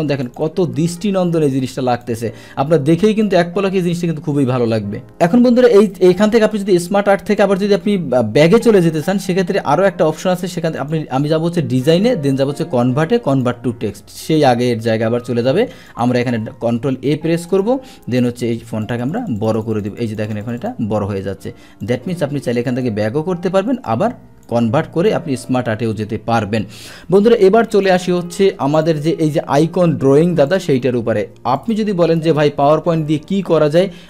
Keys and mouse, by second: 0.2 click, 1.6 click, 3.2 click, 5.1 click, 6.1 click, 8.5 click, 10.8 click, 12.3 click, 13.3 click, 15.3 ctrl+a, 16.0 click, 16.5 ctrl+a, 17.5 click, 18.8 click, 19.0 click, 19.2 click, 19.4 click, 19.5 click, 19.7 click, 19.9 click, 20.1 click, 20.3 click, 20.4 click, 20.6 click, 21.8-22.8 drag, 23.9 click, 27.8 click, 28.7 click, 30.5-31.7 drag, 32.6 Delete.